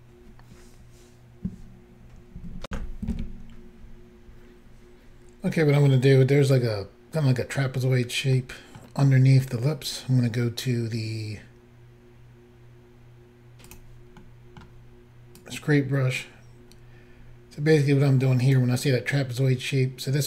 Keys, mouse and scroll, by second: 2.7 Insert, 8.4 middle click, 13.7 click, 13.8 click, 14.2 middle click, 15.4 click.